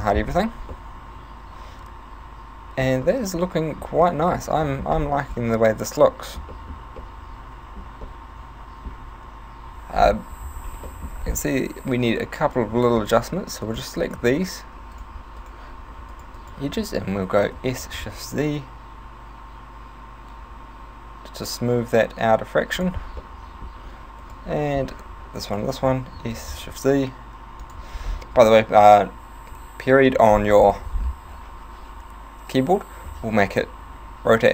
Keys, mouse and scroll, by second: 0.1-0.5 scroll up 6, 0.8 middle click, 3.1 middle click, 4.0 middle click, 4.5 Tab, 4.7 middle click, 4.9 scroll up 4, 5.5 middle click, 6.5 middle click, 7.0 middle click, 8.1 middle click, 10.0-10.6 scroll down 1, 10.6-10.9 scroll down 4, 10.9 middle click, 11.1 scroll up 5, 11.8 ., 12.5 right click, 13.0 shift+right click, 13.7 right click, 14.1 shift+right click, 15.1 shift+right click, 15.4 shift+right click, 16.1 shift+right click, 16.4 shift+right click, 17.5 s, 22.9 click, 23.2 middle click, 24.3 right click, 24.6 middle click, 25.5 shift+right click, 26.2 s, 27.7 click, 28.1-28.7 scroll down 4, 29.3 ., 29.5 ., 30.5 middle click, 31.1 scroll down 3.